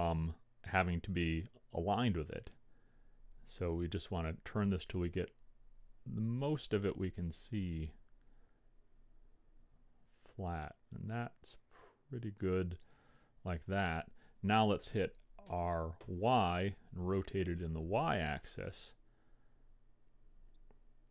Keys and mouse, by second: 15.5 r.